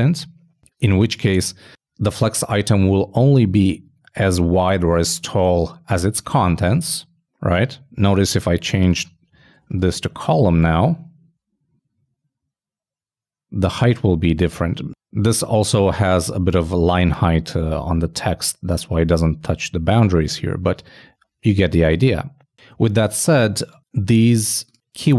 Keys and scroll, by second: 10.7 super+n, 10.9 super+s, 21.9 super+z, 22.8 super+z.